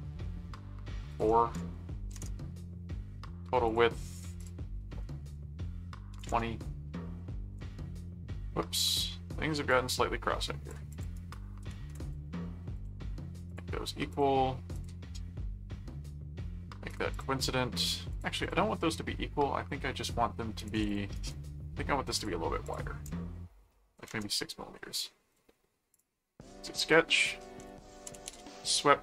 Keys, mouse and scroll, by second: 1.1 click, 3.7 click, 4.4 click, 9.7 click, 10.9 click, 11.1 right click, 12.0 ctrl+click, 12.7 ctrl+alt+click, 13.3 ctrl+alt+q, 13.5 click, 14.1 ctrl+click, 14.7 ctrl+click, 16.9 click, 18.1 click, 20.6 click, 21.1 right click, 22.2 click, 25.9 click, 26.9 middle click, 27.6-28.8 typing.